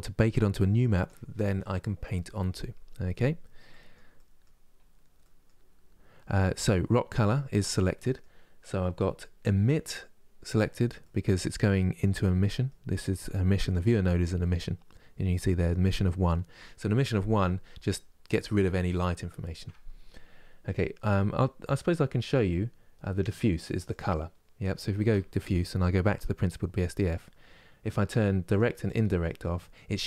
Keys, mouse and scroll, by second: 13.3-25.3 drag, 26.2-28.2 middle drag, 28.2-30.0 drag.